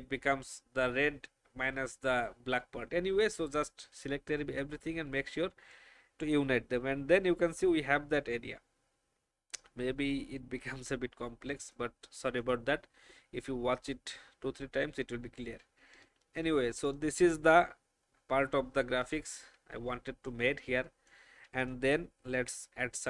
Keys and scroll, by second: 16.1 ctrl+g.